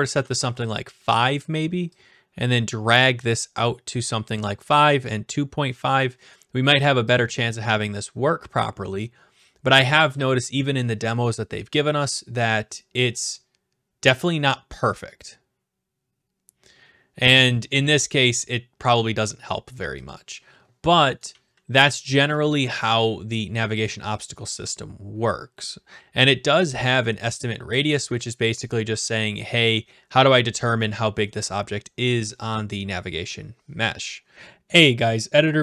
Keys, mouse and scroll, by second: 0.1 typing, 0.3 Return, 3.2-4.4 drag, 5.9-7.0 drag, 7.1-8.2 drag, 20.1-21.1 drag, 21.1-22.6 typing, 22.3-23.4 right drag, 23.9-24.9 drag.